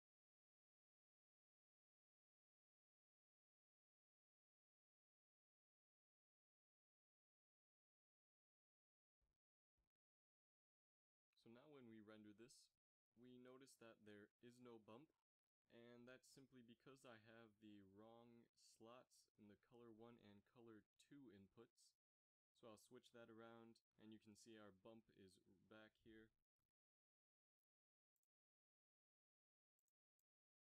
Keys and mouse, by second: 2.3-4.0 drag, 5.1-6.4 drag, 11.0 shift+z, 14.8 z, 14.9 z, 15.5 ctrl+s, 16.8 middle click, 19.1-20.1 drag, 25.2 shift+z.